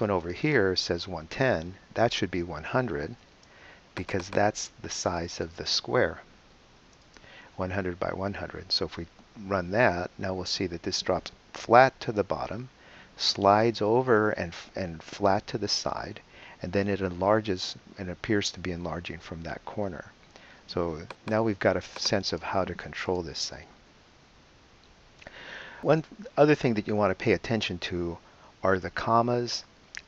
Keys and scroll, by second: 1.6 |, 1.9 0, 5.4 BackSpace, 5.6 0, 8.7 super+Return.